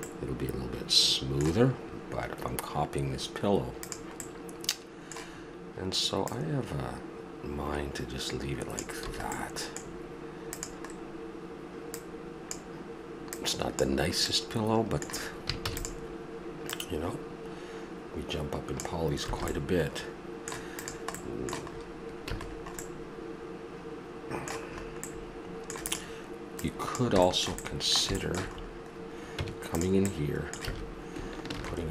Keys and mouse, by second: 1.3-3.8 middle drag, 4.2-5.8 middle drag, 6.2 click, 9.1 a, 9.4-9.8 middle drag, 10.6-11.6 right drag, 11.6-12.4 drag, 12.6-14.2 drag, 14.2-15.6 middle drag, 15.6 shift+d, 19.3 a, 19.5-20.8 middle drag, 20.8-21.2 right drag, 21.2 middle click, 22.2 a, 22.5 middle drag, 27.4-28.5 middle drag, 29.4 Tab, 30.6 a, 31.5 ctrl+r.